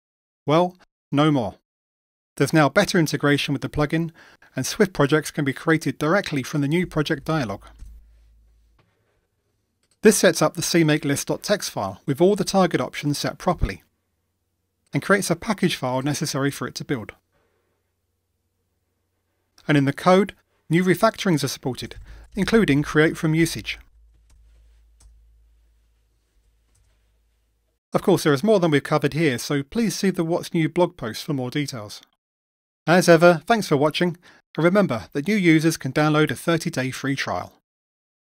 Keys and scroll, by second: 24.3 alt+Return, 27.3 Return.